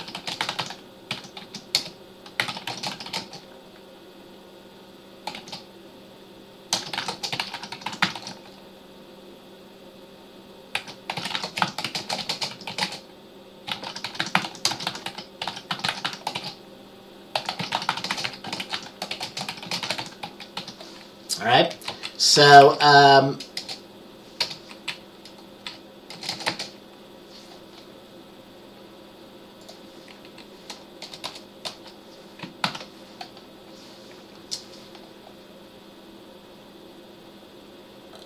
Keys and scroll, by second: 0.0-3.7 typing, 5.5 typing, 6.7-8.8 typing, 10.7-26.8 typing, 31.4 Return, 31.8 Return, 32.8 ctrl+s.